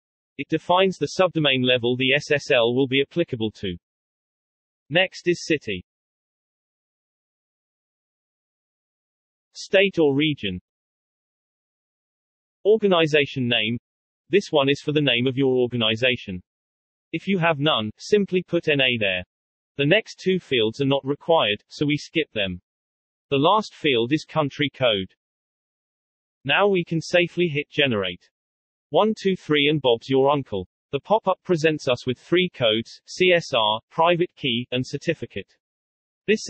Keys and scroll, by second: 7.1-8.8 typing, 8.8 Tab, 10.1-12.0 typing, 18.1-18.8 typing, 24.0-24.7 typing.